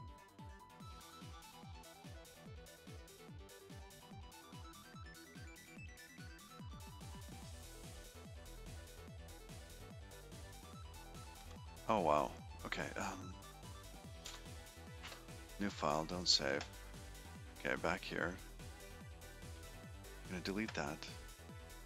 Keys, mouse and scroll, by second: 15.3 super+n.